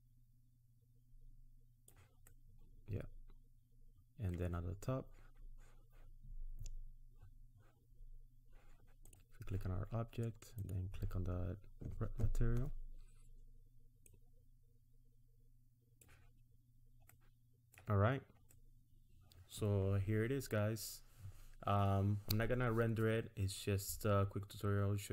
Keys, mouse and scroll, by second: 2.3 middle click, 9.1 click, 10.5 click, 14.1 click, 16.5 scroll down 3, 17.1 middle click, 18.0-18.5 scroll up 3, 18.5 middle click, 19.8-20.8 scroll down 1.